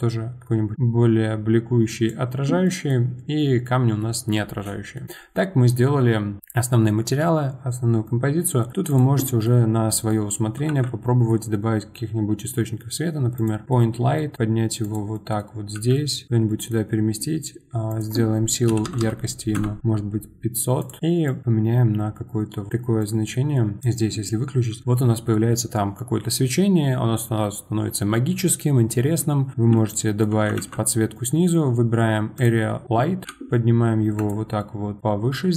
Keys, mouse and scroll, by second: 2.6-5.4 middle drag, 5.4-7.6 scroll down 1, 7.6-8.2 scroll down 1, 8.2-8.9 scroll down 1, 8.9 click, 9.2 middle click, 9.8 scroll up 1, 10.1-10.7 middle drag, 10.7 shift+a, 13.6 middle click, 14.3 g, 15.1 middle click, 15.8 g, 16.5 middle click, 17.9-19.0 drag, 19.6 KP_0, 20.8 click, 23.0 click, 23.5 middle click, 23.8 click, 29.3-29.7 scroll up 5, 29.7-30.6 shift+middle drag, 30.6 shift+a, 33.2 g, 34.6-35.0 middle drag, 35.0-35.3 scroll down 3, 35.3-35.5 middle drag.